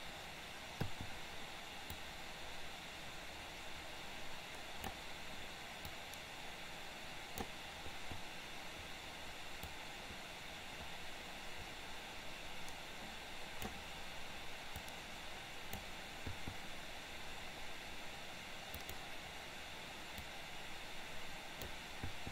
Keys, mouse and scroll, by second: 2.0-5.0 drag, 6.1-7.5 drag, 9.9-13.9 drag, 15.0 click, 19.0 click, 20.3 click, 20.6-21.9 drag.